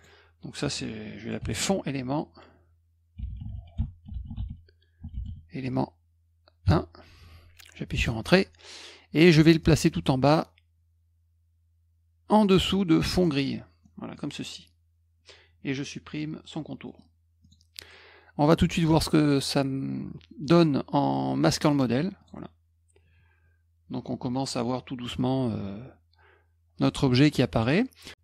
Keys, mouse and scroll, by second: 1.4 f, 2.9-5.7 typing, 7.9 Return, 9.6-12.3 drag, 13.8 middle click, 16.8 middle click, 17.4 click, 21.7 click, 22.2 click, 27.5 click.